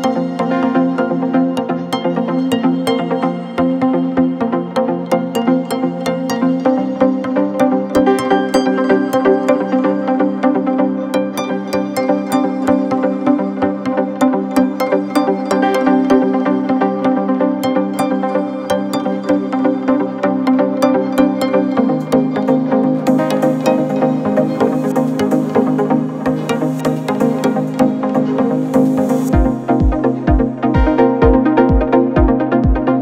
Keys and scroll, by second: 0.2 shift+i, 1.9 4, 3.8 3, 4.9-5.9 typing, 7.8 F3, 7.9 F4, 8.2 F3, 11.3 F3, 14.3 3, 16.3 F9, 25.4 4, 30.4 /.